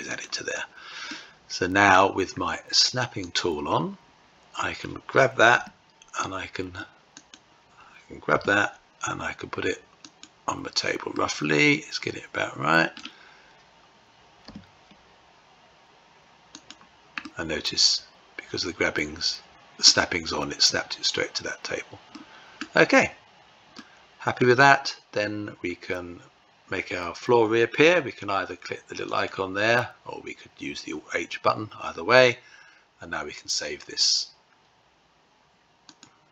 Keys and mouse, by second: 0.5 middle click, 2.7 click, 4.9 g, 6.6 click, 7.7 g, 10.5-12.4 middle drag, 13.8 g, 16.6-19.3 middle drag, 21.5-22.0 middle drag, 23.1 middle click, 28.5 click, 35.3-36.3 drag.